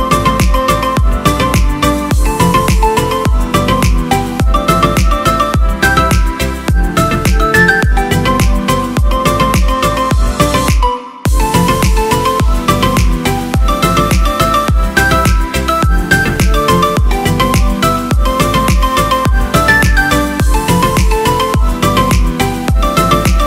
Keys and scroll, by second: 0.0-1.1 typing, 3.3-5.4 typing, 9.6 space, 11.9 space, 20.2 Delete, 22.3 Delete, 22.6 Return.